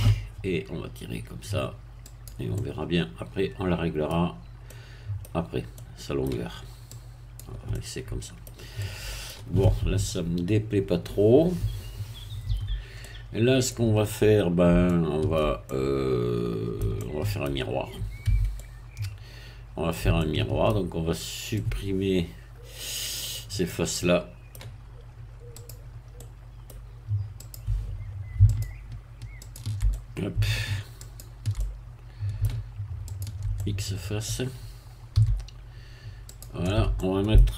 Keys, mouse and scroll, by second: 2.1 click, 2.5-4.3 middle drag, 4.3-4.7 scroll down 1, 4.7 middle click, 5.7 middle click, 6.9 click, 7.7 middle click, 8.8-12.1 middle drag, 12.5 Tab, 13.0-14.3 middle drag, 14.9-17.6 shift+middle drag, 18.3 Tab, 18.5-20.9 middle drag, 21.1 shift+scroll up 2, 21.5-24.7 middle drag, 25.5 click, 26.2 middle click, 27.4 click, 28.5 shift+click, 29.4 shift+click, 29.9 shift+middle click, 31.0 shift+click, 31.5-32.6 shift+middle drag, 33.1 shift+click, 33.6 shift+middle click, 35.1 x, 36.3 click, 36.9 middle click.